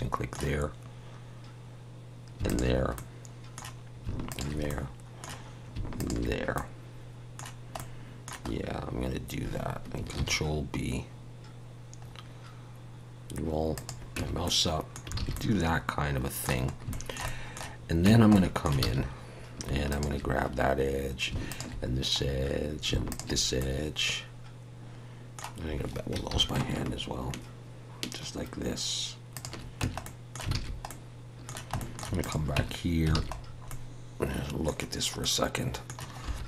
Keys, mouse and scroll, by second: 2.5 alt+shift+click, 2.9 middle click, 4.3 alt+shift+click, 4.7 middle click, 6.0 alt+shift+click, 6.5 middle click, 8.5 scroll up 1, 10.2 ctrl+b, 14.2 Tab, 14.4 middle click, 15.2 alt+a, 15.3 middle click, 16.7 scroll up 1, 16.9 shift+middle click, 17.3 middle click, 18.0 Tab, 18.3 middle click, 18.8 alt+a, 19.9 alt+shift+click, 21.5 alt+shift+click, 22.2-22.9 scroll up 1, 23.1 alt+shift+click, 23.6 middle click, 26.3 ctrl+b, 29.8 Tab, 30.0 middle click, 30.5 alt+a, 30.9 middle click, 31.8 shift+middle click, 32.2 click, 32.6 Tab, 33.1 alt+a, 33.4 scroll down 2, 33.7 middle click, 35.2 middle click, 36.3 3.